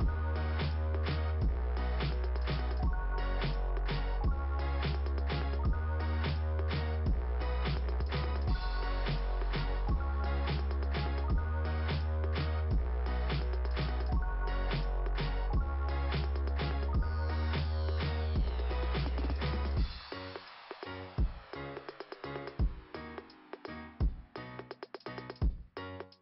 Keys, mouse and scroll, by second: 0.2 click, 0.3 click, 7.6-8.5 typing, 10.0 click, 11.9 click, 18.8 click, 19.1 click, 20.8 click, 20.9 click, 21.4 click, 21.6 click, 22.6 right click, 22.9 right click.